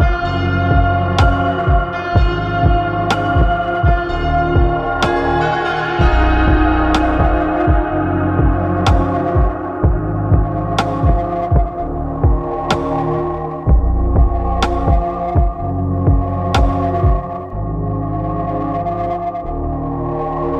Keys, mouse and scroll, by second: 4.1-9.3 drag, 9.3-9.6 scroll down 2, 9.6-12.4 middle drag, 12.4 click, 13.2-14.4 right drag, 14.4-14.8 scroll down 1, 14.8-15.9 middle drag, 15.9 click, 16.5-16.9 scroll down 2, 16.9-20.1 middle drag.